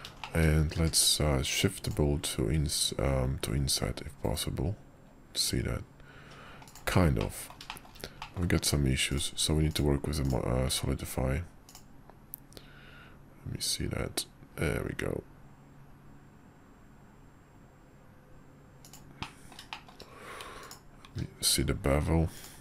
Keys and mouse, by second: 0.2 shift+middle click, 0.8 q, 7.2 middle drag, 7.7 shift+middle drag, 8.2 middle click, 10.2 click, 10.6 q, 19.2-19.6 middle drag, 19.7 shift+middle drag, 20.6 click, 21.0 q.